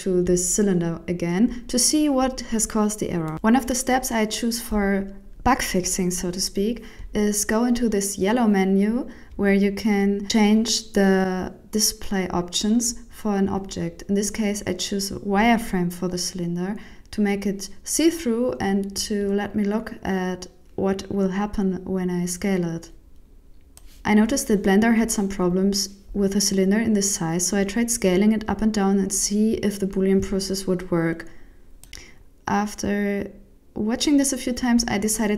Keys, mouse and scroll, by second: 0.7 scroll down 5, 1.7 KP_1.